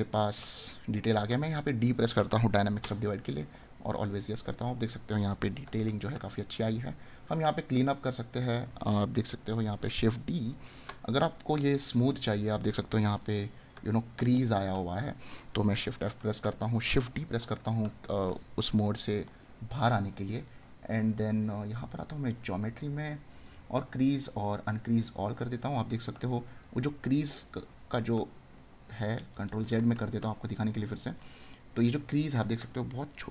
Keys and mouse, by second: 4.9 right click, 11.0 right click, 13.8 right click, 16.3 right click, 26.1 right click, 32.5 right click.